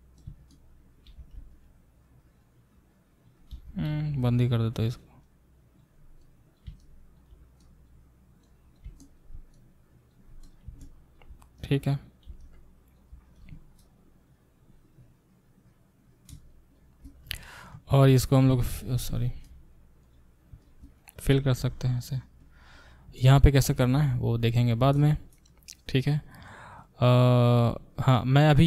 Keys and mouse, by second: 3.5 g, 4.6-10.5 drag, 10.5-11.6 alt+middle drag, 11.6-13.4 drag, 13.4 shift+middle click, 14.0-16.5 drag, 16.5 shift+middle click, 16.7 shift+click, 17.0 middle click, 17.2 click, 17.3 middle click, 17.7 shift+click, 18.0-19.4 shift+middle drag, 18.5 f, 19.3 ctrl+z, 19.4 ctrl+click, 19.5-20.6 middle drag, 20.0 click, 20.6 shift+click, 20.7-24.5 shift+middle drag, 21.3 f, 21.6 f, 24.0 ctrl+z, 24.5 click, 24.8-28.6 alt+shift+middle drag.